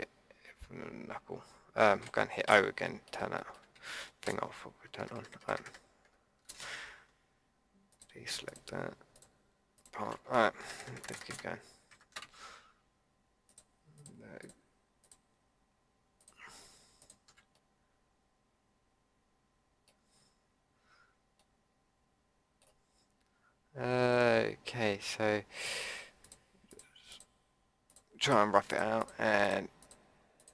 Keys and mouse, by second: 2.4 o, 3.4 click, 4.2 ctrl+KP_Add, 7.9-9.2 middle drag, 9.2-10.6 drag, 10.6 ctrl+KP_Add, 15.1-19.5 middle drag, 21.4 middle click, 22.2-23.4 drag, 24.8-30.5 drag.